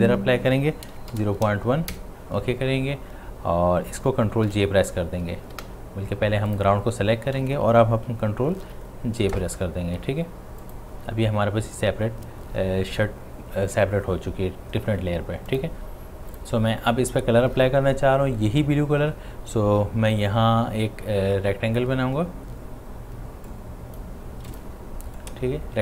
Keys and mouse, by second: 4.5 ctrl+j, 6.5 click, 8.6 ctrl+j, 10.6 click, 15.5 click, 23.5-25.8 drag.